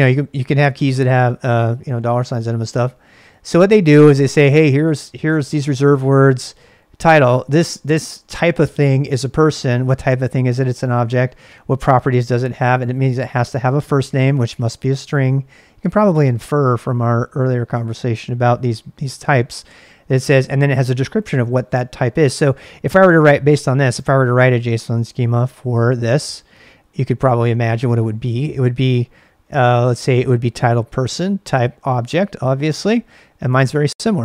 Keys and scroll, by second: 25.1 ctrl+a, 25.3 ctrl+a, 26.1 super+Tab.